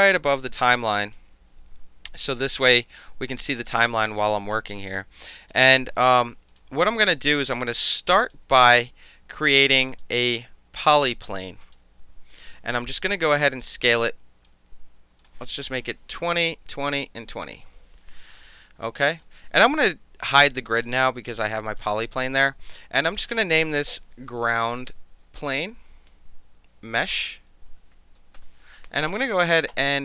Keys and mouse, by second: 4.0 click, 5.4 click, 6.5 click, 6.9 alt+drag, 7.4-7.8 alt+right drag, 8.1 alt+click, 9.9 click, 11.6 click, 12.8 r, 13.6 click, 15.2 click, 16.1-17.2 typing, 16.4 Tab, 16.8 Tab, 17.5 KP_Enter, 19.0 alt+click, 20.7 click, 21.7 click, 23.1 click, 23.8-28.7 typing.